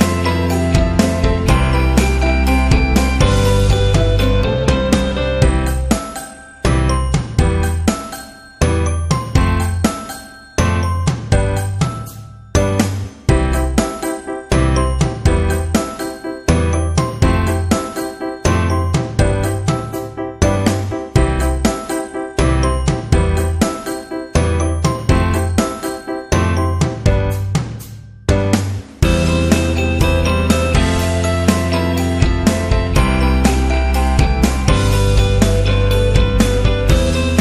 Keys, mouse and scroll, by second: 0.8 click, 1.6 click, 2.4-3.4 scroll down 2, 3.4 space, 3.7 click, 4.0 space, 4.7 scroll down 1, 5.0 space, 5.1 click, 6.6 click, 7.4 click, 7.4 click, 9.2 click, 12.5 alt+shift+click, 13.0 click, 13.6 alt+shift+click, 14.3 click, 14.6 Up, 15.2 Left, 15.7 Down, 16.0 Left, 17.0-17.3 scroll down 1, 17.5-20.6 typing, 17.7 click, 18.6 scroll up 1, 19.1 click, 20.3 click, 22.2 ctrl+t, 23.0-26.3 alt+shift+drag, 26.3 click, 27.7 Down, 28.8 space, 29.1 click, 29.4 space, 30.4 space.